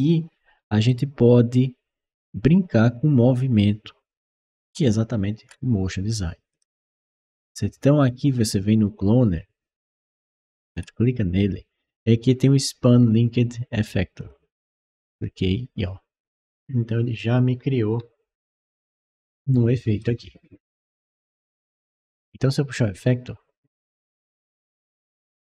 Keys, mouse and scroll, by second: 0.7 right click, 6.3 click, 8.3 click, 10.0 middle click, 10.5 scroll down 1, 10.6-11.0 scroll up 2, 10.7 middle click, 14.0 click, 15.0-19.8 right drag, 20.7-21.4 middle drag, 21.4 click, 22.6-23.9 drag, 24.2-25.4 right drag, 24.4-25.4 typing.